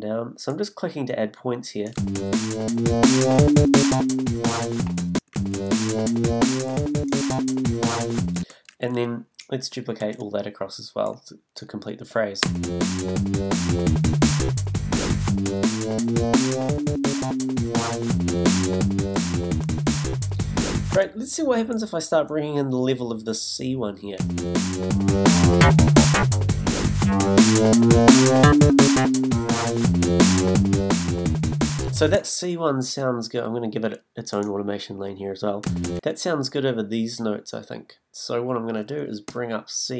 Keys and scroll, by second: 1.9 space, 5.1 space, 8.4 space, 10.0 super+d, 12.4 space, 24.2 space, 32.1 space, 35.6 space, 39.2 b.